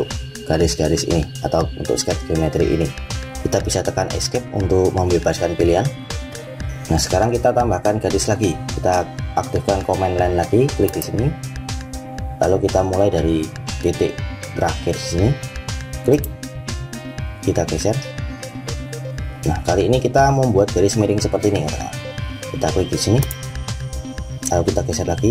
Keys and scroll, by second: 4.3 Escape.